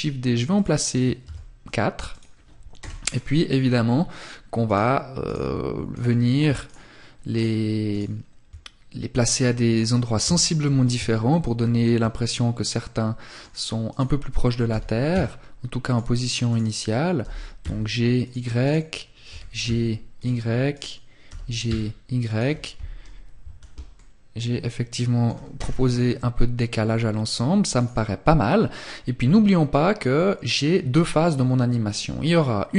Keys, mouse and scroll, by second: 0.3 shift+d, 1.3 click, 1.9 KP_0, 2.6 scroll up 1, 3.3-3.8 scroll up 1, 3.8 right click, 5.7 right click, 6.4 shift+right click, 7.0 shift+right click, 9.3 KP_3, 10.4 shift+middle click, 11.9 middle click, 13.0 right click, 13.8 g, 15.0 click, 15.6 right click, 16.3 g, 17.4 click, 17.7 right click, 18.4 g, 19.3 click, 19.8 right click, 20.4 g, 22.9 scroll up 1, 23.0 middle click, 24.6 KP_0, 24.8 scroll down 1, 26.8 right click, 28.8 click.